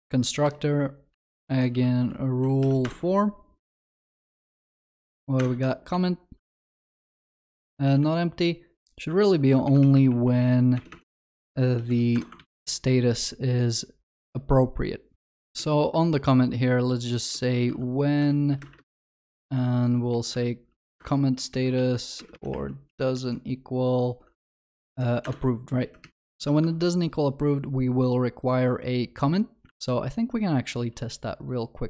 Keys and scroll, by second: 9.2 ctrl+d, 10.7 ctrl+BackSpace, 12.3 Return, 12.5 ctrl+s, 18.2 Return, 25.4 Return, 26.3 ctrl+alt+shift+l, 26.7 ctrl+s.